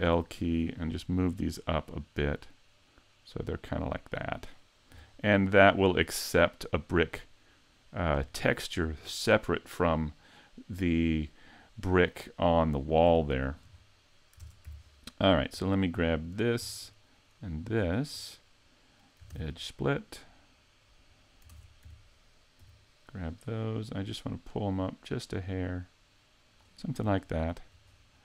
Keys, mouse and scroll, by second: 0.2 l, 0.6 middle click, 2.3 click, 4.4-5.0 scroll up 2, 5.0 a, 5.4 middle click, 6.9-7.6 scroll down 3, 8.3 shift+middle click, 9.1 middle click, 12.8-13.2 scroll up 4, 13.2 shift+middle click, 13.8-14.4 scroll up 1, 14.4 ctrl+Tab, 14.4 scroll up 1, 16.4 alt+right click, 17.2 shift+right click, 17.8 alt+right click, 19.3 ctrl+e, 21.5 ctrl+Tab, 22.8 l, 24.2 click, 27.2 shift+middle click, 27.9-28.2 scroll up 5.